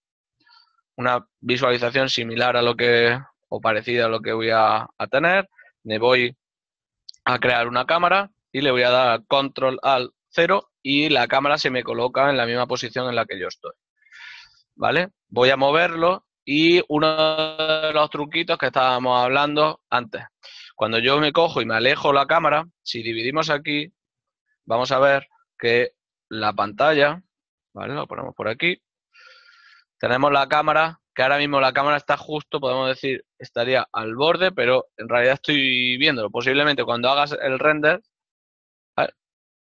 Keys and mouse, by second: 18.2 right click, 22.0 z, 22.6 right click, 23.7 click, 25.8 KP_7, 26.7 KP_5, 27.3 ctrl+middle click, 29.3 z, 29.6 click, 30.9 shift+middle click, 38.1 shift+z.